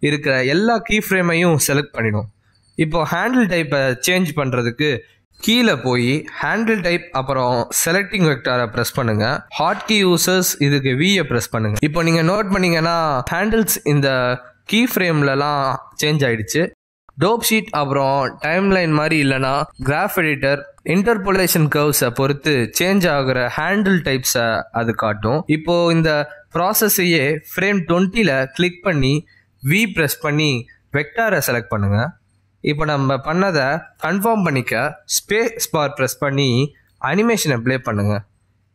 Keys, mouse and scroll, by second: 0.9 click, 7.4 click, 13.9 v, 17.8-18.1 scroll up 4, 18.1 middle click, 18.9 a, 19.0 scroll down 1, 31.0 alt+click, 32.5 v, 37.1 click, 37.7 space.